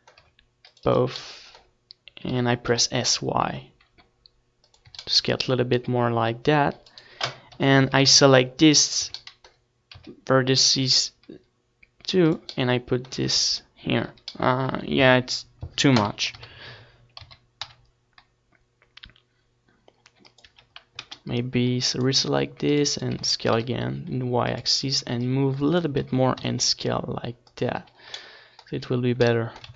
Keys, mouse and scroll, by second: 0.3 z, 0.8-2.9 right drag, 1.0 z, 2.0 g, 3.2-4.8 drag, 3.4 z, 4.1 right click, 4.1 z, 4.6 g, 5.4 right click, 5.7 click, 5.7 z, 6.4 z, 6.8 g, 7.7 middle click, 7.9-9.7 drag, 9.0 Tab, 9.9 Tab, 11.5 a, 11.8 c, 12.8-16.2 middle drag, 13.4 c, 15.7 s, 18.5 click, 18.6 a, 19.7 c, 21.7 KP_1, 22.0 z, 22.4 c, 23.4 z, 23.7-25.3 middle drag, 24.5 s, 27.2-29.0 drag, 28.1 ctrl+s, 29.3-29.7 middle drag.